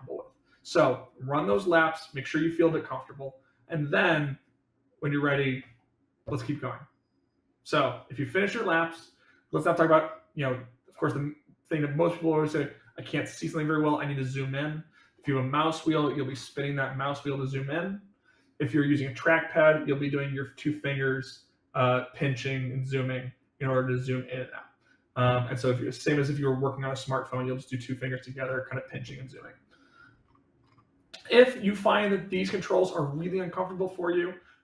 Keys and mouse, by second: 9.8-11.6 middle drag, 31.3-32.7 middle drag.